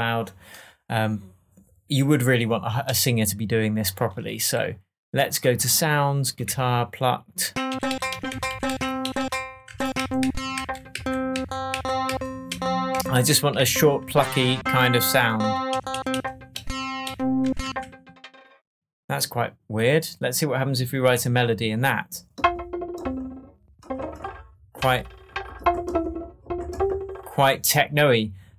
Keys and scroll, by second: 6.4 Right, 7.7 Up, 8.3 Down, 9.0 Up, 9.6 Down, 12.5 Up, 12.9 Down, 13.6 Right, 14.0 Down, 15.7 Up, 17.4 Down.